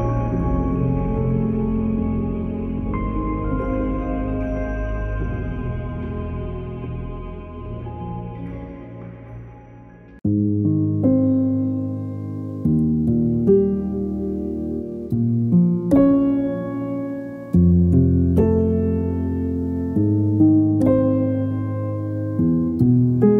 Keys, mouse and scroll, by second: 0.2 click, 0.6-2.2 typing, 3.7 click, 4.8-5.5 typing, 7.3 click, 8.5-9.2 typing, 13.9 click, 17.4 ctrl+click, 17.8 ctrl+e, 18.6 click, 21.3 click.